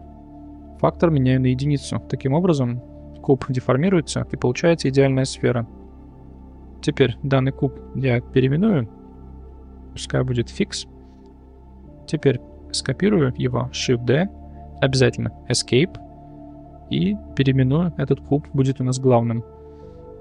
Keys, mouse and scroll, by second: 1.0 click, 2.7-3.1 middle drag, 6.8 click, 7.7 click, 7.8-10.6 drag, 9.4 BackSpace, 9.5 BackSpace, 13.9 shift+d, 17.2-19.1 drag.